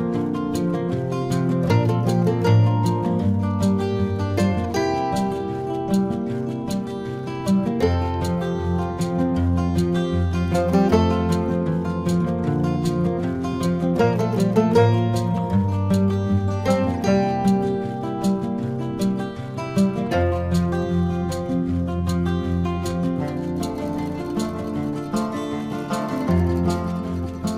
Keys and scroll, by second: 3.1-6.3 typing, 4.3 ctrl+alt+z, 6.6 ctrl+-, 7.3 ctrl+-, 10.9 space, 13.6 space, 14.1 ctrl+alt+z, 16.6 space, 24.5 space, 26.8 space.